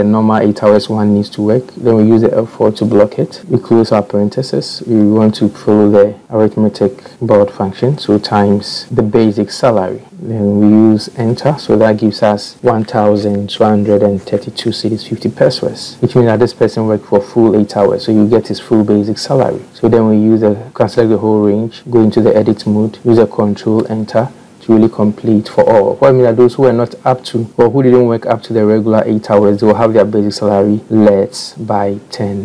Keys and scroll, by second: 2.5 F4.